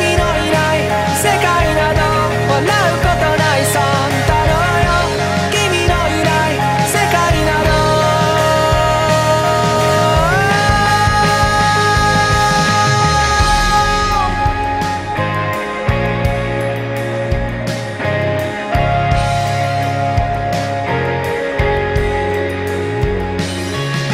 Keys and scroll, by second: 0.6 ctrl+z, 2.4 ctrl+e, 5.4 ctrl+z, 6.4 ctrl+z, 6.9 ctrl+z, 7.6 ctrl+z, 7.7 ctrl+e, 10.4 ctrl+z, 12.9 ctrl+z, 13.9 ctrl+s, 15.8 ctrl+z, 22.7 ctrl+z.